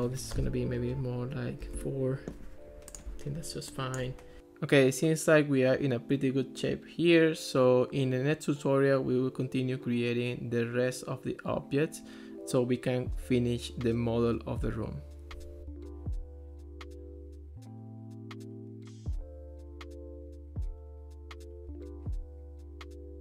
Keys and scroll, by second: 1.6 4, 1.8 Return.